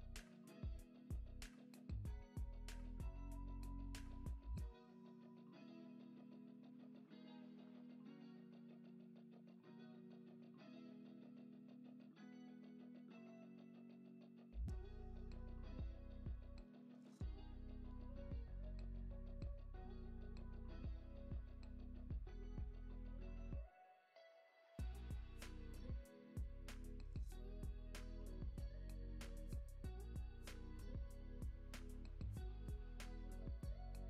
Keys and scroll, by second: 5.4 space, 7.7 space, 8.0 super+s, 11.7 super+Up, 28.5 space, 29.6 space, 30.0 super+z, 31.2 space.